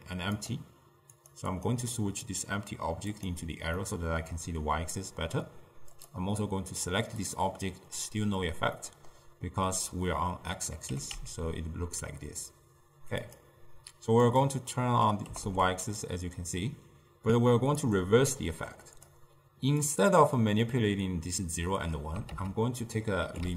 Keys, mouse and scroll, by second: 0.4 click, 1.6 click, 2.3-3.9 drag, 3.9-6.0 middle drag, 6.0 click, 8.9-11.0 middle drag, 11.0 g, 14.4-15.4 drag, 15.4 g, 18.4-19.2 middle drag, 19.2-22.2 drag, 22.4 ctrl+a.